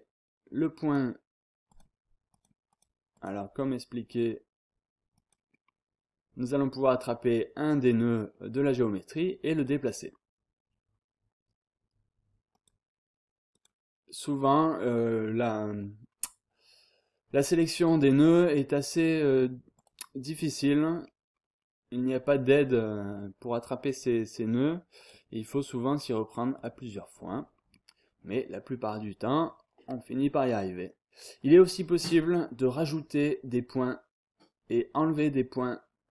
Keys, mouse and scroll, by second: 0.8 click, 1.7-3.7 drag, 5.1 click, 5.5 scroll down 1, 5.7-6.2 scroll up 1, 6.8-7.4 scroll up 1, 7.7-8.2 scroll up 1, 8.2-8.8 scroll down 1, 9.5 click, 10.5 scroll down 2, 10.8-11.4 scroll up 2, 12.5 click, 13.5 click, 14.8 scroll down 2, 15.0 scroll up 2, 15.3-15.7 scroll down 2, 15.7-16.3 scroll up 2, 19.7 click, 20.3 scroll down 2, 20.5-21.0 scroll up 2, 21.0 scroll down 2, 21.3-21.9 scroll up 1, 21.9 scroll down 1, 22.2-22.7 scroll up 1, 25.0 click, 26.5 click, 26.9-27.2 scroll down 1, 27.2-27.7 scroll up 1, 27.7 scroll down 1, 27.9-28.4 scroll up 1, 28.4-28.8 scroll down 1, 28.8-29.5 scroll up 2, 29.5-30.0 scroll down 2.